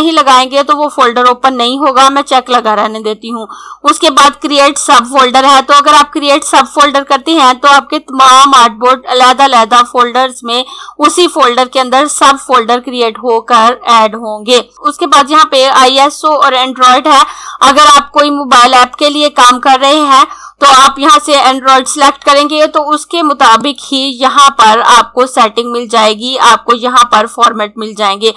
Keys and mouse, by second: 23.4 click.